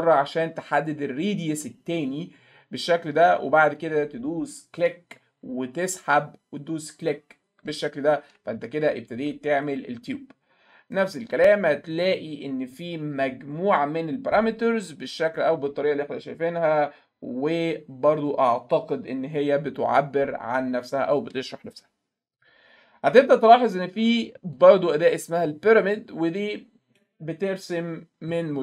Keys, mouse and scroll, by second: 4.8 click, 7.0 click, 7.7 alt+middle click, 8.3 alt+middle click, 8.6 alt+middle click, 10.9 right click, 11.9 click, 22.4 click, 24.6 click, 26.5 middle click, 27.0 middle click.